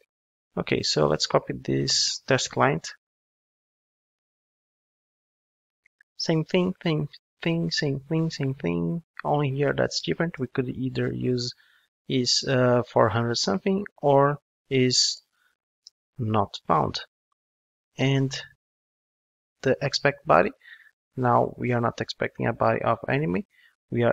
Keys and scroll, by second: 2.0 super+c, 2.9 super+v, 15.8 Return, 23.3 super+x.